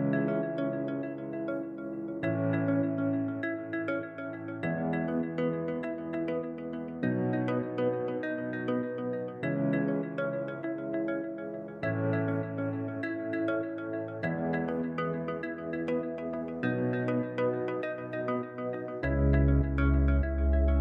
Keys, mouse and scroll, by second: 0.0 click, 2.5 click, 9.4-12.6 middle drag, 12.8-13.4 scroll up 2, 15.3 click, 15.8 scroll down 4, 19.6 shift+a.